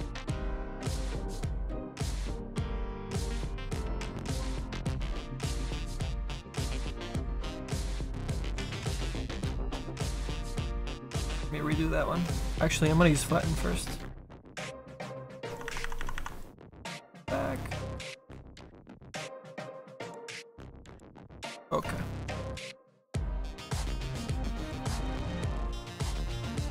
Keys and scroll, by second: 10.6 ctrl+z, 15.5 ctrl+z, 15.9 ctrl+z.